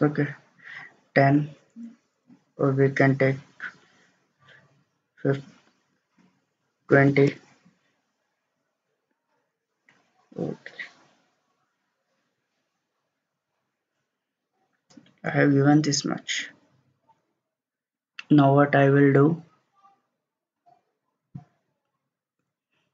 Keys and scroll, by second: 3.5-3.8 typing, 5.6-7.3 typing.